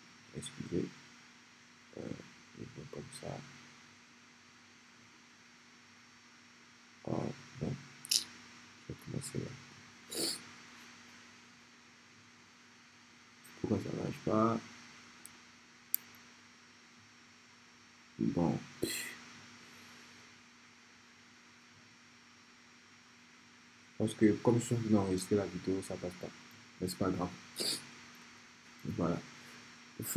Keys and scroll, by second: 28.2 Escape.